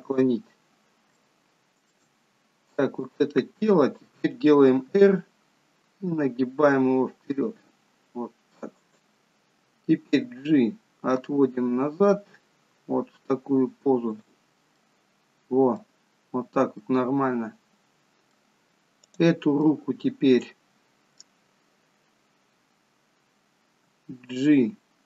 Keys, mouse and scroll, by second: 0.8-1.2 scroll down 2, 1.3 shift+middle click, 3.1 click, 4.9 r, 10.2 g, 14.9 middle click, 16.3-16.9 scroll up 1, 16.9 middle click, 16.9 scroll up 1, 19.2 click, 19.8 middle click, 23.8 g.